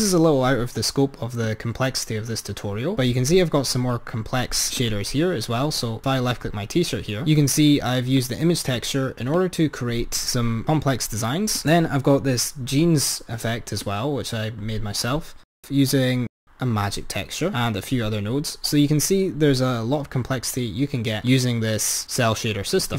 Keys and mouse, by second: 1.5-3.2 drag, 4.9-5.4 drag, 7.3-8.5 drag, 9.3-10.1 drag, 11.7 click, 14.1-16.6 drag, 21.3 click.